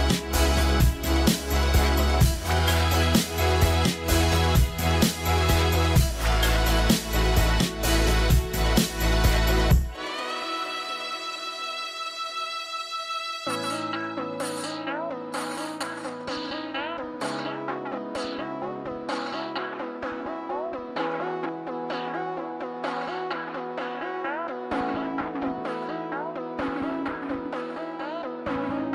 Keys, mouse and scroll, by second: 0.4 middle click, 7.9 scroll down 1, 12.6 scroll down 1, 12.6 scroll up 1, 13.3 scroll down 1, 14.2 scroll up 1, 14.6-15.1 scroll down 1, 27.5 scroll up 1.